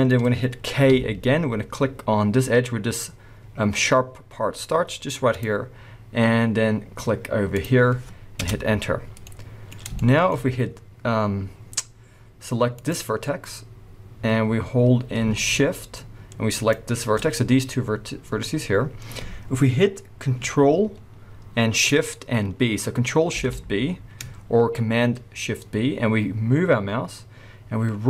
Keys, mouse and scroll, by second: 0.1-0.9 scroll up 1, 0.9 k, 8.4 Return, 8.7 scroll down 1, 9.3 middle click, 11.9-12.7 scroll up 1, 12.7 click, 16.5 shift+click, 23.3 ctrl+shift+b.